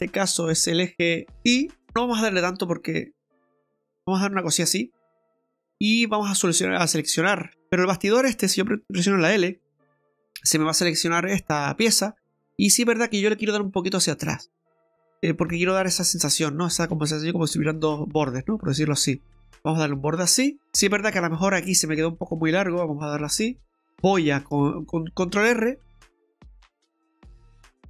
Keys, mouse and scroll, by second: 1.9-2.6 scroll up 2, 2.6 click, 6.0 right click, 6.6 right click, 7.5 middle click, 9.5 l, 11.9 click, 17.5 click, 20.6 middle click, 20.8 right click, 21.1 middle click, 22.3 click, 23.7 middle click, 25.6 ctrl+r, 26.8 middle click.